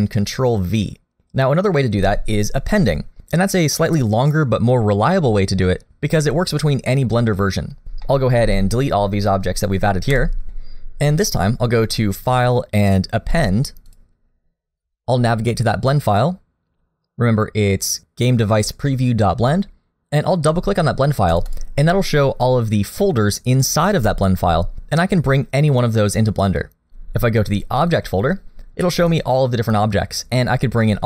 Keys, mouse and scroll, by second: 8.0 middle click, 8.4 a, 10.1 Delete, 10.4 middle click, 10.4 scroll down 3, 11.2-12.1 scroll up 1, 12.1 click.